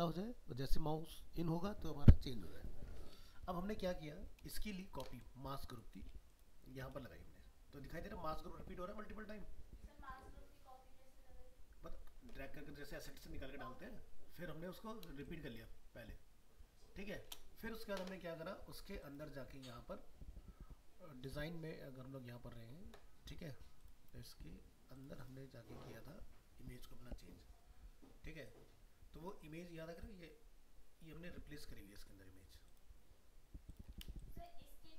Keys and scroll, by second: 3.1 ctrl+-.